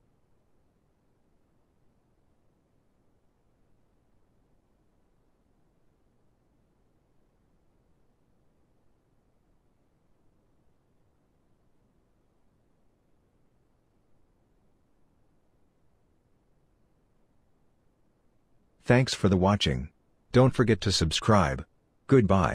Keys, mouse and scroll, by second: 3.6 middle click, 9.8 middle click, 12.9 scroll down 1, 13.1 middle click, 15.6 middle click, 20.3 middle click.